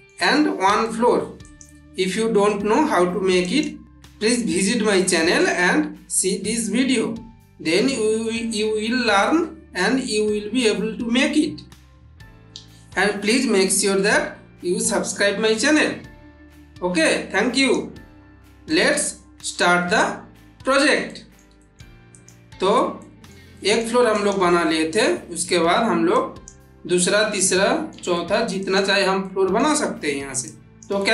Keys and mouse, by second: 1.2 click, 3.2 click, 17.4 click, 18.5-20.6 middle drag, 22.0 click, 22.9 middle click, 24.0 click, 26.0-26.6 click, 27.2-27.8 middle click, 28.5 click, 29.1-29.7 middle click, 30.3-30.9 drag.